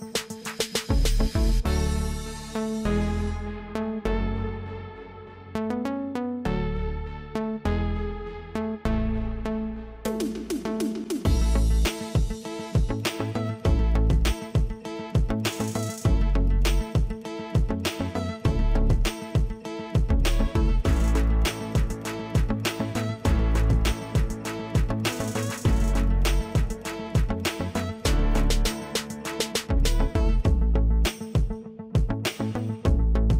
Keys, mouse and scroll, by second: 1.0 shift+click, 2.9 click, 4.1 alt+click, 7.0 click, 9.0 shift+click, 10.9 click, 12.9 alt+click, 14.1 ctrl+click, 17.4 click, 23.2 ctrl+click, 25.9-28.2 scroll down 1, 28.2 click, 31.5 BackSpace.